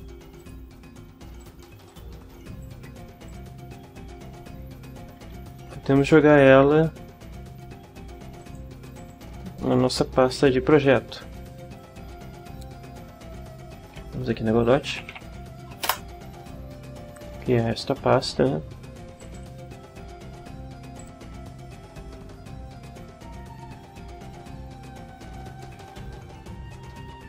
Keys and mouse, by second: 0.4 click, 1.4 shift+click, 1.9 shift+click, 2.6 click, 3.3 shift+click, 5.5 ctrl+x, 8.4 click, 9.0 click, 11.6 click, 14.5-15.6 typing, 15.9 Return, 19.2 click, 21.0 click.